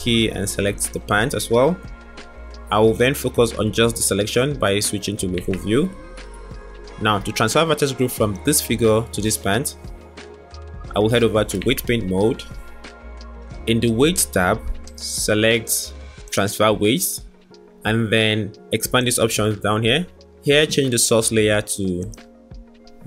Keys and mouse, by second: 2.1-3.9 middle drag, 4.2 middle click, 4.4-5.3 drag, 5.3 middle click, 6.7 middle click, 7.6-9.2 drag, 11.6 Tab, 14.8-16.3 drag, 19.1 click, 21.9 click.